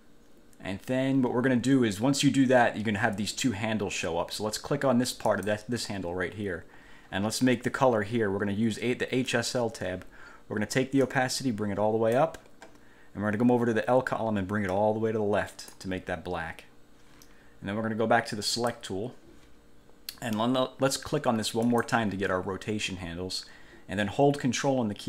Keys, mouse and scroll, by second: 5.5 click, 9.5 click, 11.2-12.5 drag, 14.9 click, 18.7 click, 21.8 click.